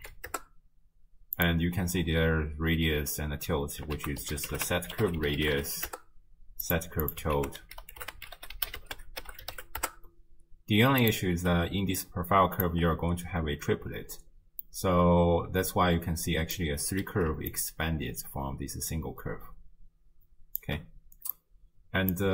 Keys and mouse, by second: 4.0 ctrl+a, 7.1 click, 7.4 ctrl+a, 11.6 d, 12.0 click, 12.7 d, 12.7 d, 14.7-16.6 drag, 17.5-20.6 shift+drag, 21.3 click, 21.6 click.